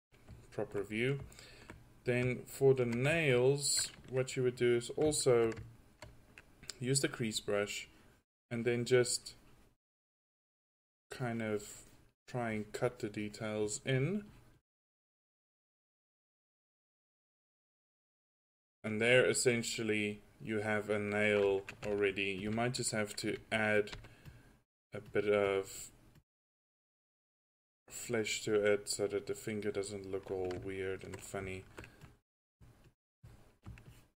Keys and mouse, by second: 5.0 drag, 7.2-7.7 drag, 12.2 drag, 19.0-19.4 middle drag, 19.6 middle click, 19.8 click, 24.0 f, 29.5 middle click, 32.1-32.8 drag.